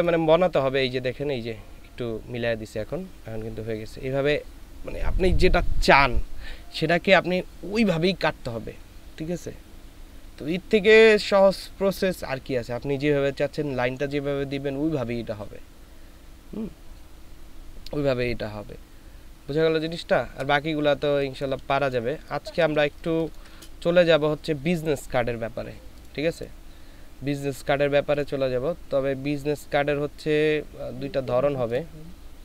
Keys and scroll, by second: 20.9 space, 22.0 ctrl+space, 22.9 ctrl+space.